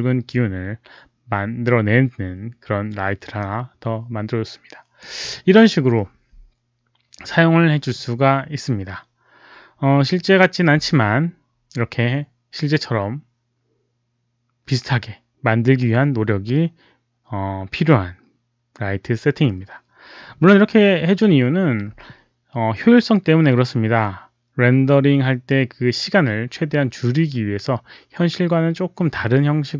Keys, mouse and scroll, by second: 3.3-4.9 drag.